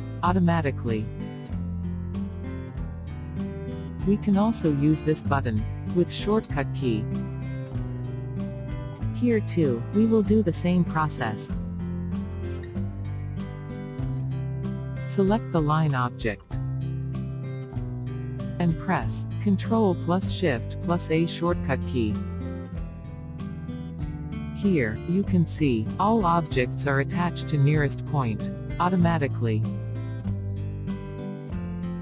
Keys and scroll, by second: 9.3 f, 19.0 ctrl+shift+a.